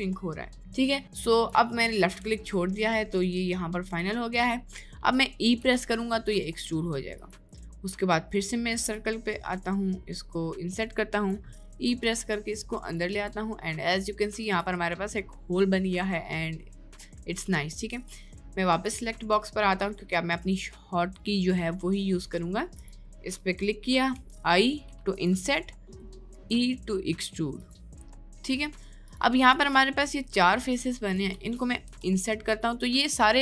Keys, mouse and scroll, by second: 2.7-3.8 middle drag, 5.6 e, 7.7 middle click, 8.9-11.5 drag, 11.5 middle click, 11.9 e, 13.2 Tab, 13.5 middle click, 14.1 middle click, 14.5 Tab, 18.8 click, 19.4 middle click, 20.1 middle click, 20.6 middle click, 21.7 middle click, 22.3 shift+middle click, 23.4 middle click, 25.5 middle click, 26.3 e, 28.5 middle click, 29.9 middle click.